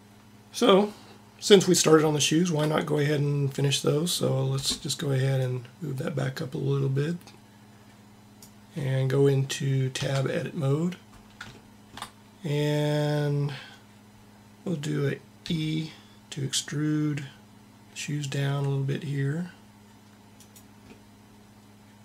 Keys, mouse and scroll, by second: 5.4-7.2 drag, 9.9 Tab, 15.3 e.